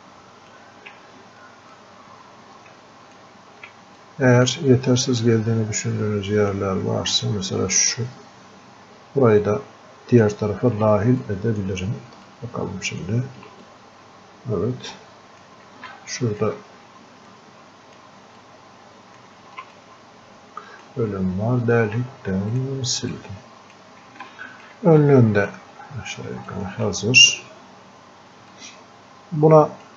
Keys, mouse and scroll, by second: 1.8-4.0 ctrl+shift+drag, 4.3 click, 5.5-6.8 drag, 7.5-10.3 ctrl+alt+shift+drag, 11.2 click, 12.3-16.0 ctrl+shift+drag, 16.0-18.5 alt+drag, 18.5-19.8 ctrl+alt+drag, 19.8-24.3 ctrl+drag, 24.3 alt+click, 25.1-26.5 drag, 26.5-28.5 alt+drag, 28.5-29.9 drag.